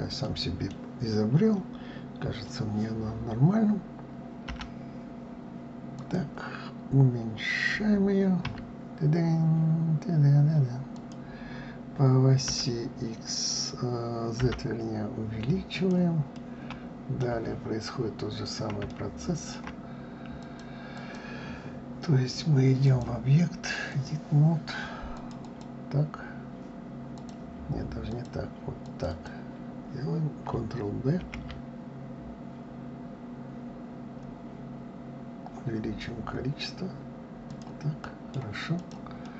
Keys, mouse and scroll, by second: 0.2-3.2 middle drag, 16.3-18.0 middle drag, 18.0-18.9 scroll up 2, 18.9-20.4 shift+middle drag, 20.4 click, 20.9 click, 22.8-25.3 drag, 25.4 click, 27.1 click, 28.1 click, 28.8 click, 29.1 click, 31.2 ctrl+b, 38.0 middle click, 38.7 click, 39.2-39.3 middle drag.